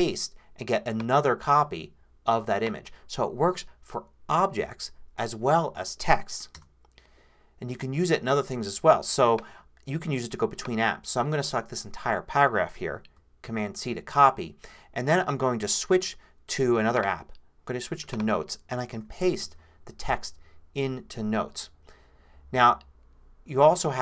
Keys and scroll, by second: 6.5 BackSpace, 13.4 super+c, 18.9 super+v.